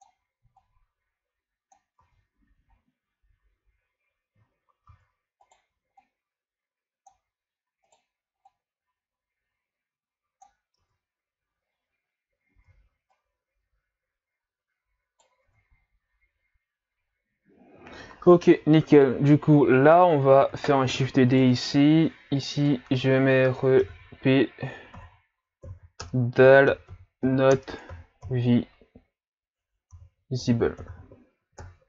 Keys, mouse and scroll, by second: 2.0 Tab, 4.5-4.9 scroll down 2, 4.9 Tab, 5.4 right click, 6.0-7.8 drag, 7.8 right click, 8.5-10.8 drag, 10.8 Tab, 12.5 Tab, 13.1 right click, 15.4 Tab, 17.5-18.2 scroll down 4, 18.2-18.8 scroll up 3, 18.9 right click, 20.9 shift+d, 22.4 click, 22.6-25.6 drag.